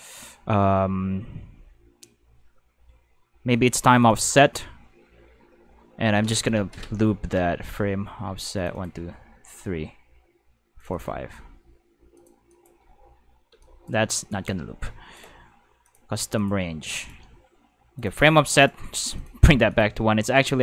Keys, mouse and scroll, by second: 4.0 click, 8.6 drag, 8.7 click, 10.9-11.3 drag, 12.1 click, 12.5 click, 12.8 space, 13.5 space, 13.6 click, 14.1 click, 15.1 click, 15.8 click, 16.3 click, 17.0 click, 18.0 click, 18.6 click, 19.1 click, 19.7 click.